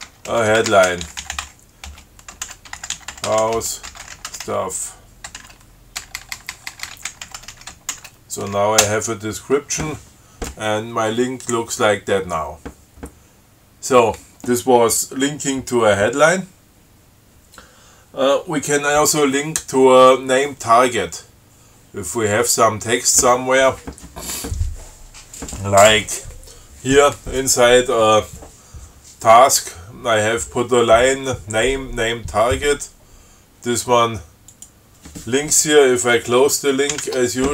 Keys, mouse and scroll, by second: 0.0-5.6 typing, 6.9-8.2 typing, 9.1 Return, 34.7 click, 37.1 alt+9.